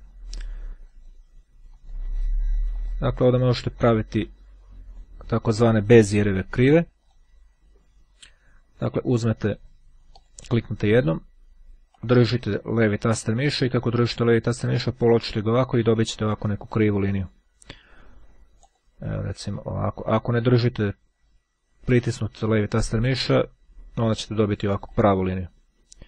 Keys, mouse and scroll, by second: 0.8 click, 1.8 click, 2.8 click, 3.8-5.6 drag, 9.0-10.0 scroll down 1, 10.3 click, 12.1-17.9 drag, 18.8 click, 24.9 click.